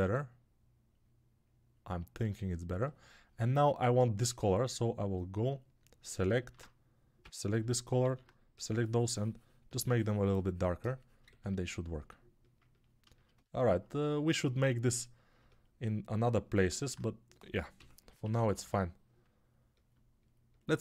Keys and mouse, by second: 5.1 right click, 6.3 alt+q, 7.1 s, 7.9 alt+q, 16.6 alt+q, 17.6 g, 18.1 [, 18.2 [, 18.4 [.